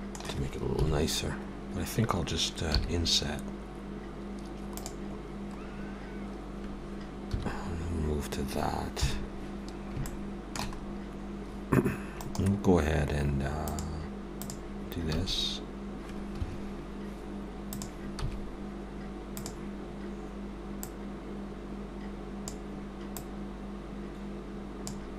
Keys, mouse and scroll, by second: 4.8 i, 5.7-6.0 scroll up 2, 10.1 shift+middle click, 10.8 scroll up 1, 12.2 right click, 15.2 s, 17.7 click, 18.2 s, 20.9 click, 23.2 click.